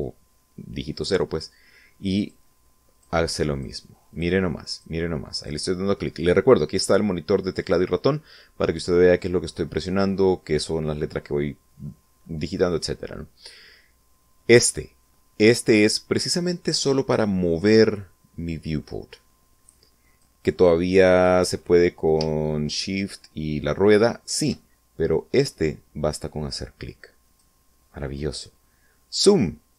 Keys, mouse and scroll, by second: 2.0 click, 2.7 click, 3.3 click, 3.9 click, 4.5 click, 5.2 click, 17.2-20.2 drag, 22.6-24.3 shift+middle drag, 25.5-27.4 drag, 29.5-29.7 drag.